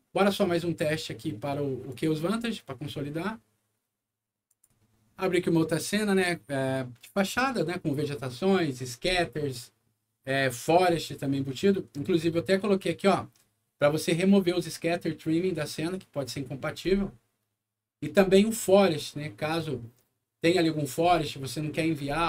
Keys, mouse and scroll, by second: 1.9 click, 4.4 click.